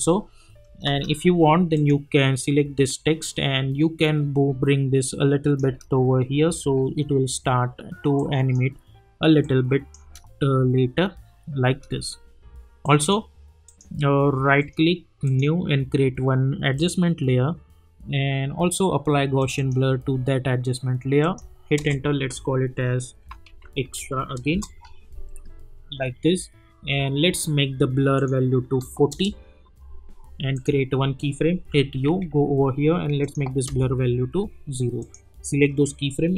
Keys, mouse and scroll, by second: 1.7-5.6 drag, 5.6 space, 8.1-10.0 drag, 10.0 space, 12.8 click, 14.6 right click, 15.2 click, 16.8 click, 19.4 click, 21.8 Return, 23.0-24.4 typing, 26.3 Return, 28.1 click, 29.1 Return, 30.5 click, 31.3-32.5 typing, 33.2 click, 33.6 Return, 35.0 click, 35.4 F9, 36.1 click.